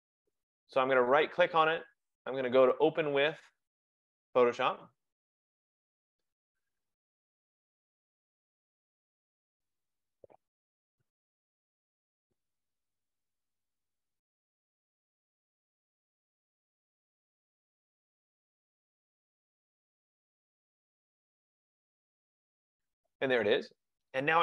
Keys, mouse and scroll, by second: 1.2 right click, 4.9 click.